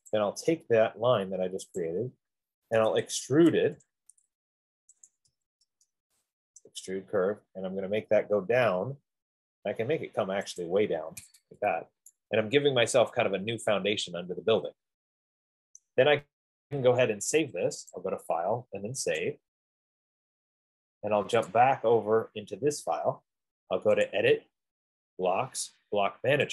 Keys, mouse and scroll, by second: 0.5 click, 2.1 click, 3.1-4.0 typing, 5.2-6.8 typing, 8.2-8.8 middle click, 8.4 middle click, 9.0 middle click, 11.1 click, 11.9 Escape, 16.2 right click, 18.5 click, 19.5 click, 22.0 click.